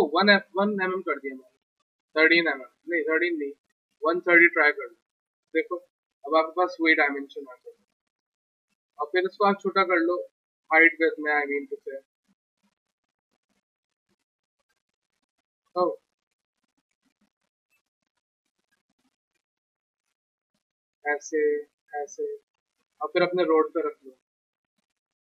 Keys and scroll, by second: 0.2 ctrl+a, 1.0-1.8 typing, 3.5-4.5 typing, 9.2 r, 11.2 r, 13.3 r, 13.8 r, 16.2 ctrl+z, 17.2 r, 22.2 w, 23.1 w.